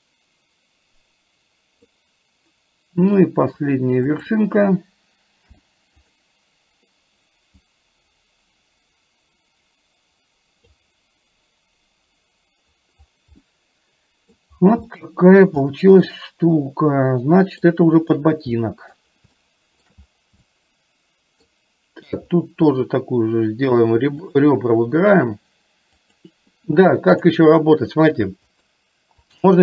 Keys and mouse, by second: 3.2 click, 4.2 shift+click, 5.6 m, 7.8-10.8 drag, 13.5 middle click, 15.0 shift+middle click, 15.7-17.7 middle drag, 18.7 middle click, 19.6 shift+middle click, 20.6 middle click, 24.3 click, 26.1 click, 27.2 click, 29.3 shift+click.